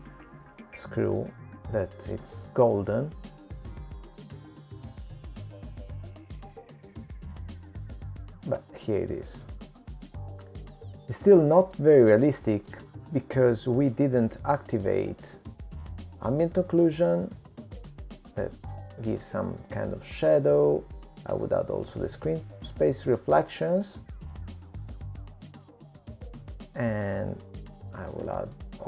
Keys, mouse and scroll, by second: 1.4 right click, 5.0 right click, 5.0 click, 7.2 click, 8.2 middle click, 11.1 middle click, 16.2 middle click, 18.8 click, 20.7 click, 21.7 middle click, 24.1 middle click, 25.9 click, 27.3 middle click.